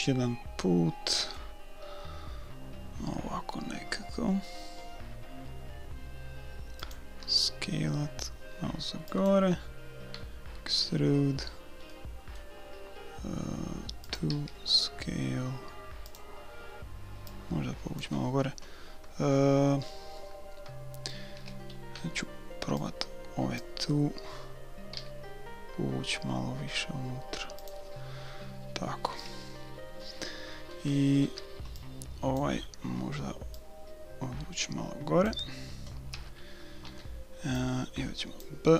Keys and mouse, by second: 7.2 s, 10.2 e, 14.4 s, 17.3-19.3 drag, 21.4 a, 22.0 b, 24.9 s, 29.5 a, 31.3 b, 33.5-35.5 drag, 36.1 a, 36.9 b.